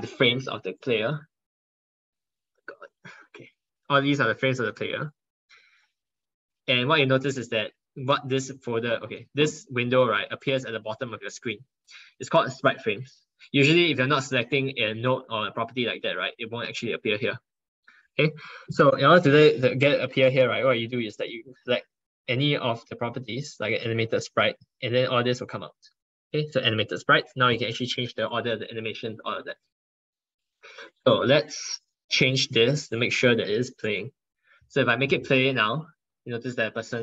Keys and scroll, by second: 19.1 ctrl+1, 19.8 ctrl+1, 25.3 ctrl+1, 25.9 ctrl+1.